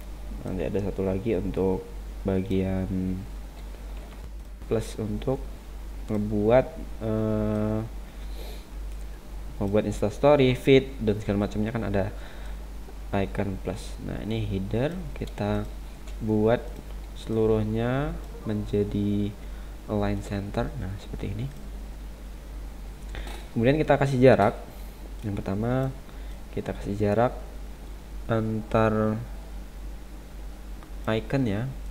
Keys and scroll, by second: 4.1 Tab.